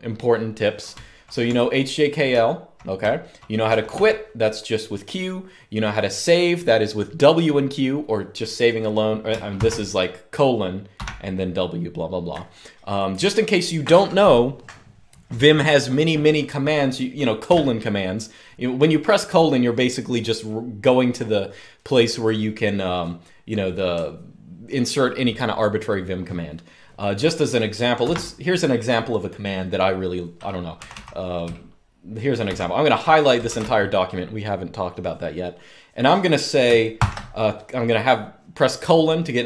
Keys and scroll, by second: 0.7-3.7 typing, 9.3 typing, 10.7 typing, 17.2 BackSpace, 27.8 Escape, 30.5 typing, 32.2-33.2 typing, 36.7 typing.